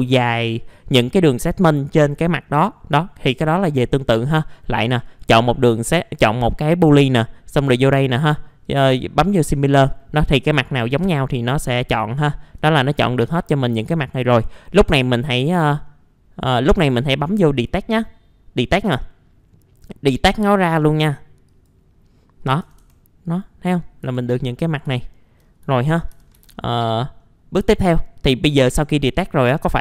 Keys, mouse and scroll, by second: 4.0 click, 9.5-10.4 scroll down 1, 10.5 alt+middle click, 11.0 scroll up 1, 12.1 alt+middle click, 13.0 scroll down 1, 13.3 alt+middle click, 14.2 scroll up 1, 14.4 middle click, 15.9 alt+middle click, 17.0 middle click, 17.4-17.7 scroll up 1, 22.4-23.2 scroll up 3, 23.2 click, 24.0 F4, 24.3-24.9 scroll down 1, 25.0 alt+middle click, 25.4 scroll down 1, 25.7 alt+middle click, 26.1 alt+f, 26.4 typing, 26.5-26.9 scroll down 1, 27.2 middle click, 27.6 click, 29.7 middle click.